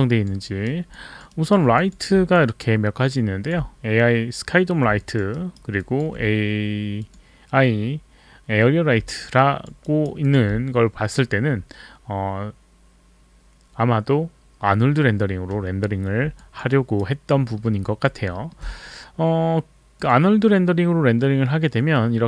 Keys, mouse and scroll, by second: 0.1 alt+click, 0.4 alt+right click, 1.3 alt+right click, 1.8 click, 5.0 alt+click, 5.3 alt+right click, 5.9 alt+click, 5.9 alt+right click, 7.0 click, 9.1 alt+click, 9.8 alt+right click, 10.2 alt+click, 16.4 alt+click, 16.7 alt+right click, 17.4 alt+middle click, 17.8 alt+click, 18.3 alt+middle click, 20.0 click.